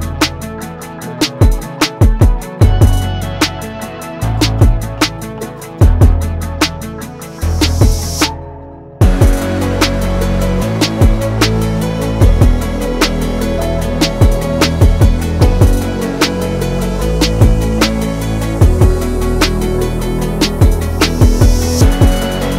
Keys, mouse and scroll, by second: 0.7-2.0 drag, 3.9 click, 6.0-7.7 alt+drag, 7.7-12.1 alt+drag, 12.5 click, 16.0-22.4 drag.